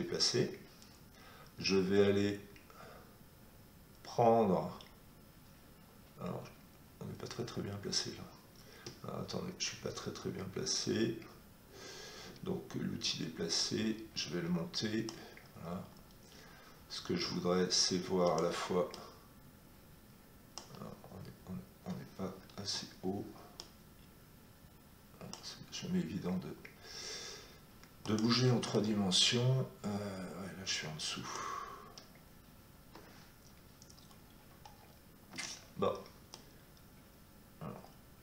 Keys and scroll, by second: 22.5 Escape, 35.2 Escape.